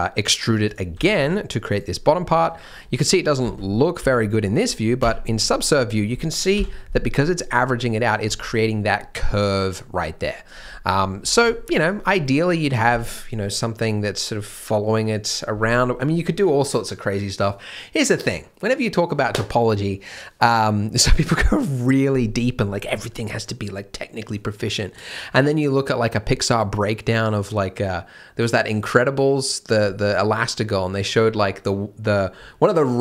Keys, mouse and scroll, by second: 0.9 g, 2.0 middle click, 3.4 z, 4.5 middle click, 4.5 z, 5.0 Tab, 5.3 middle click, 8.2 z, 10.8-11.2 scroll up 1, 11.2 Tab, 11.5 shift+middle click.